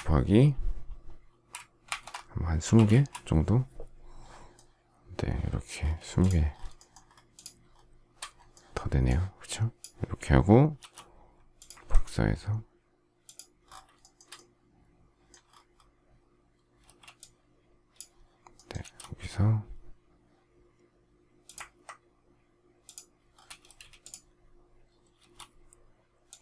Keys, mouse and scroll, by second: 1.8-3.2 typing, 5.9 space, 6.7 shift+middle click, 7.0 shift+scroll up 1, 7.2 shift+click, 7.6-8.9 shift+scroll up 1, 10.7 m, 13.9 shift+middle click, 16.7 space, 18.7 m, 23.6 space, 25.1 m.